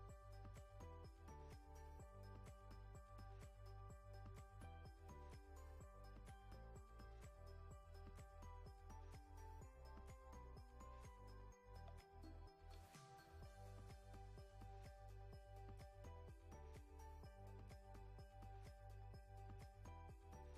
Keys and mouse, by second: 0.0 KP_1, 3.4 KP_3, 11.4 right click, 12.1-13.2 middle drag, 13.9 KP_1.